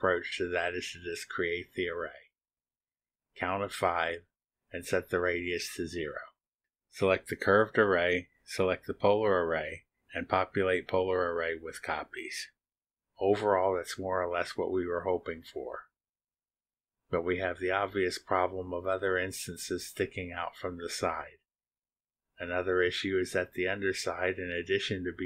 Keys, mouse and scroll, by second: 0.6 click, 3.5 middle click, 5.1 click, 5.8 0, 6.6 click, 8.6 click, 9.5 ctrl+click, 11.4 click, 15.5 click, 16.7 click, 17.2 space, 19.7-21.7 drag, 24.1 click, 24.2-24.9 middle drag, 24.2-24.9 scroll down 1, 25.2 scroll up 2.